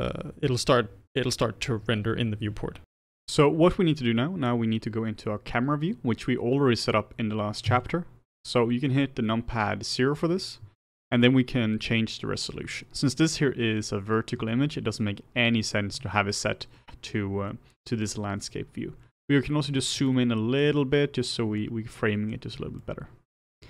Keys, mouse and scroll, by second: 2.8 click, 7.6 KP_0, 19.3-20.0 scroll down 1, 20.0-21.1 shift+middle drag, 21.1-21.5 scroll up 1, 21.5-23.6 shift+middle drag.